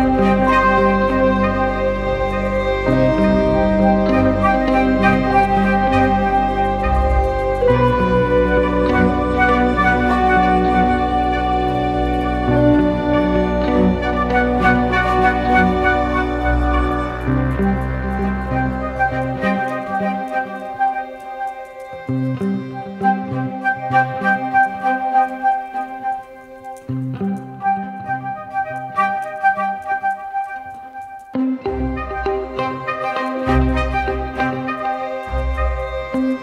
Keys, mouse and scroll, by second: 3.4 right click, 4.9 right click, 5.4 typing, 7.2 typing, 12.4 right click, 14.0-14.5 typing, 17.6-17.9 typing, 22.4 double click, 24.1 right click, 31.5-33.9 scroll up 1.